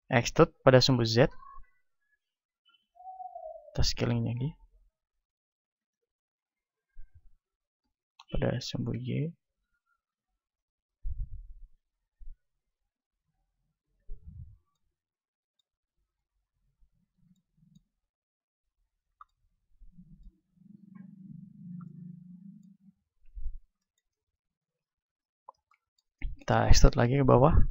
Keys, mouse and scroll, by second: 0.4 e, 3.0-4.6 drag, 3.4 s, 6.0-7.6 drag, 7.6 s, 9.8-13.6 drag, 13.3 r, 14.0-15.9 drag, 15.9-18.8 right drag, 18.3-20.6 drag, 18.3 middle click, 22.2 middle click, 23.2-24.9 middle drag, 23.2 KP_1, 26.6-27.7 middle drag, 26.6 e.